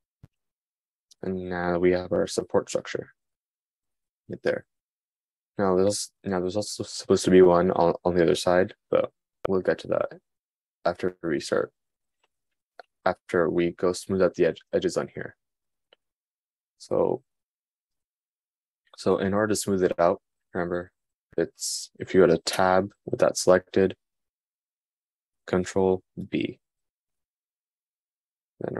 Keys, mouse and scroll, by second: 23.1 Tab, 26.9 super+b.